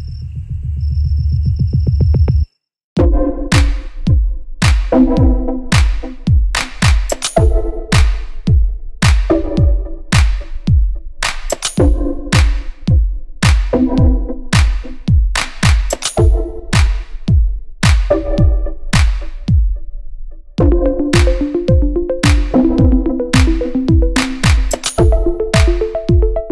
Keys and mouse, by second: 0.4 g, 5.0 shift+a, 7.0 s, 8.3 s, 9.6 KP_1, 9.7 KP_3, 10.5 s, 11.7 r, 12.3 g, 13.0 r, 14.1 s, 14.7 s, 16.9 s, 17.4 g, 18.3 r, 20.8-24.1 shift+drag, 24.1 shift+middle click, 24.6-26.5 shift+drag, 25.9 KP_1, 26.3 KP_3.